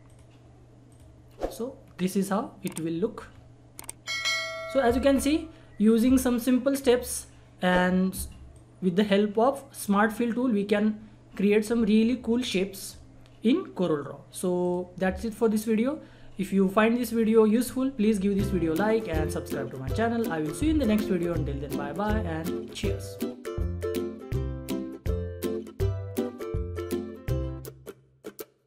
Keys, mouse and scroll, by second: 1.3 scroll down 1, 3.9 scroll up 1, 5.7 scroll down 1, 8.5 click, 14.6 click.